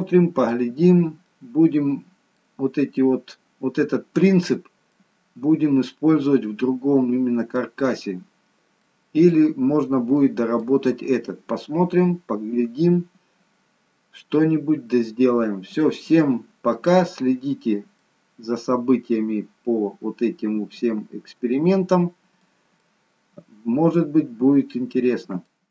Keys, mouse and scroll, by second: 1.2 middle click, 2.9 middle click, 4.9 middle click, 8.2 scroll down 2, 8.8 middle click, 9.7-10.1 scroll up 2, 10.1 middle click, 11.4 middle click, 17.1-17.9 scroll down 1, 17.9 middle click, 17.9 scroll down 1, 22.7 middle click.